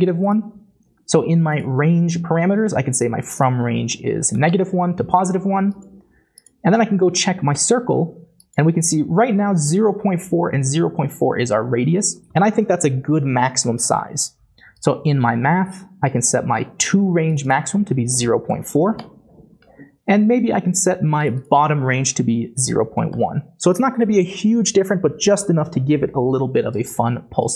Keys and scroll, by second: 4.2-5.0 typing, 10.0-10.7 typing, 18.2-19.2 typing, 22.3-23.0 typing, 23.1 Return, 26.9 typing.